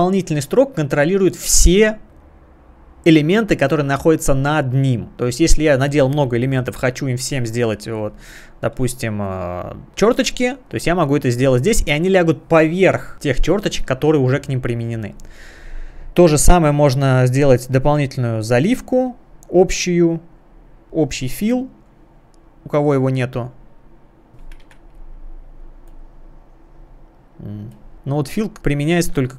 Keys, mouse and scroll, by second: 2.9 click, 9.9 click, 15.9 click, 17.4 click, 20.7 click, 22.2 click, 24.0 click, 24.6 Escape, 25.1 click, 25.5 click, 25.7 click, 26.1 click, 26.6 click, 26.9 click, 27.2 click, 27.4 click, 27.5 click, 27.6 click.